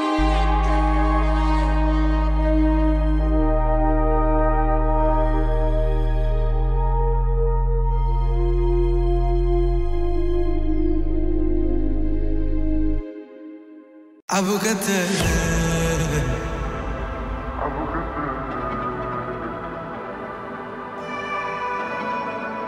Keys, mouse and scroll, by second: 1.5 r, 5.8-6.4 drag, 12.3 scroll down 1, 14.0 click, 16.1 typing, 18.3-19.8 drag.